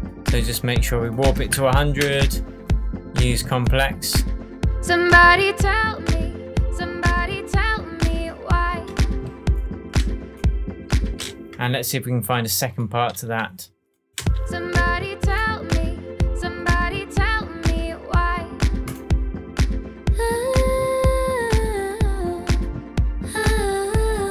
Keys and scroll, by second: 1.0-1.8 typing, 2.0 Return, 11.0 space, 11.5 shift+Tab, 14.2 space.